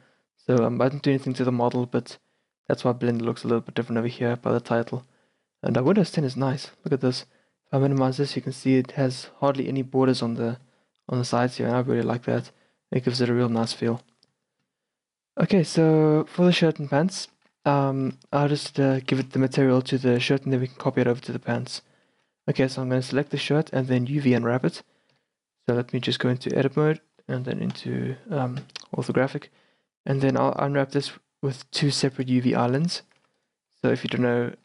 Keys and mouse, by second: 17.2-18.8 middle drag, 18.8 a, 20.6-21.9 right drag, 22.2-25.2 middle drag, 25.2 KP_Decimal, 25.7-26.3 middle drag, 26.3 Tab, 26.9 z, 27.8 KP_5, 33.2 a, 34.2 z.